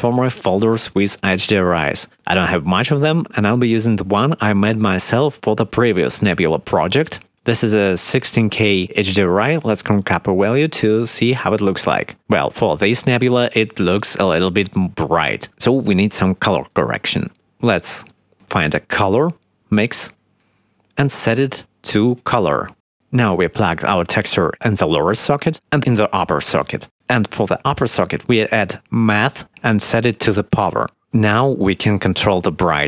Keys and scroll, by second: 9.5 1, 15.0 0, 15.6 0, 17.2 shift+a, 26.7 shift+a.